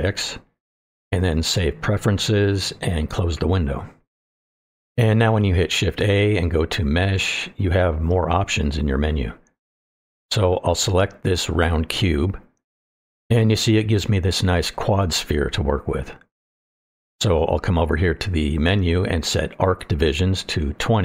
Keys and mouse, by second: 6.8 shift+a, 13.5-13.9 shift+middle drag, 14.2-17.7 middle drag, 19.5 click.